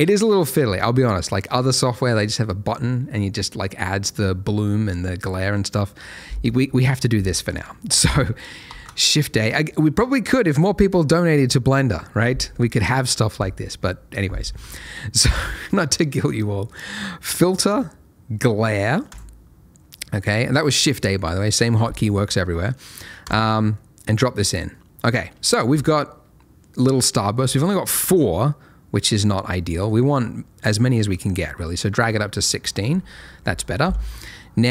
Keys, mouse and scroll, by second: 9.1 shift+a, 19.1 click, 23.2 click, 23.7 middle click, 27.9 middle click, 29.0 click, 30.7 middle click.